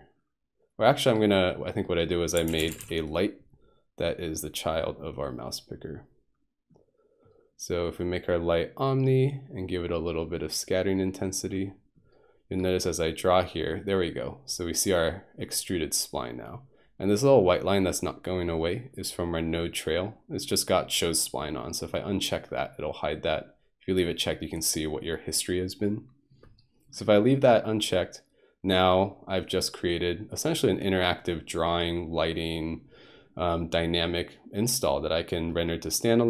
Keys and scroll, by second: 2.4-2.8 typing.